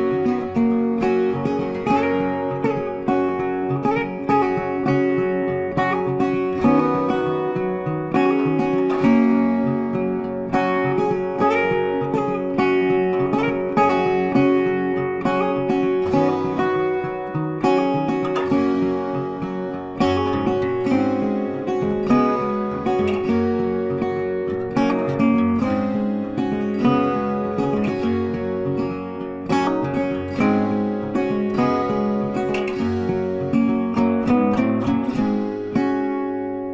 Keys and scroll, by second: 0.2 z, 1.9 space, 6.0 ctrl+space, 11.5 ctrl+space, 12.0 ctrl+shift+c, 12.6 ctrl+shift+z, 14.0 space, 27.1 space, 31.0 shift+Page_Up.